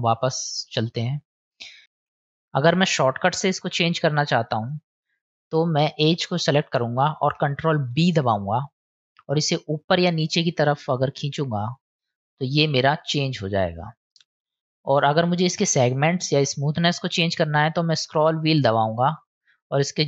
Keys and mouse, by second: 1.8 ctrl+z, 2.1 ctrl+z, 3.1 middle click, 4.6 click, 7.9 ctrl+b.